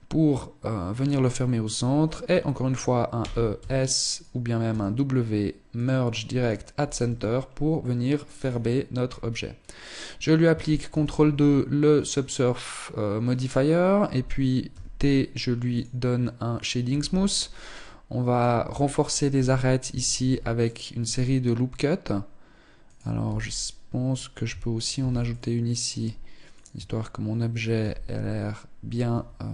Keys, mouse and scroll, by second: 2.6 e, 4.1 w, 6.4 Tab, 7.2 middle click, 7.8 scroll down 6, 8.4-9.0 scroll up 3, 10.3 ctrl+2, 14.1 t, 15.2 click, 16.3 t, 16.8-17.2 scroll up 2, 17.2 middle click, 18.0 Tab, 18.2-19.3 scroll up 2, 19.6 ctrl+r, 22.6 z, 24.4 ctrl+r, 26.2 Tab, 27.2 z, 28.5 Tab.